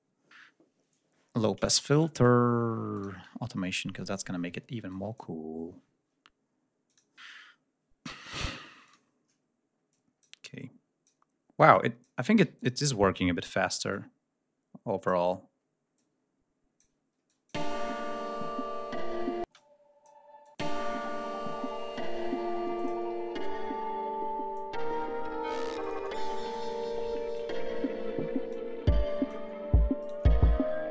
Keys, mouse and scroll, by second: 4.7 click, 6.7 click, 8.7 click, 9.7 click, 10.3-11.1 drag, 11.5 click, 12.2 d, 12.4 click, 13.7-15.1 drag, 15.8 click, 17.1 click, 17.4 space, 19.3 space, 19.4 click, 20.2 click, 20.4 space, 22.6 click, 23.2 shift+right click, 24.3-25.9 drag, 26.1 click, 27.1 shift+right click, 28.3 click, 29.8 shift+right click, 30.5 ctrl+shift+scroll down 1, 30.8 ctrl+scroll up 2.